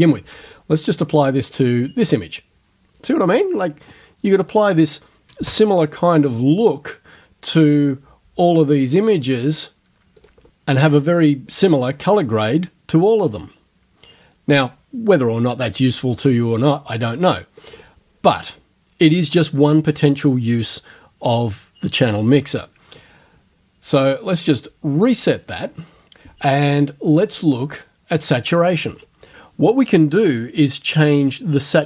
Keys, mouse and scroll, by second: 0.5 click, 1.5 click, 5.5 space, 9.1 click, 10.2 click, 12.1 click, 17.6 click, 24.6 click, 27.1 click, 29.0 click.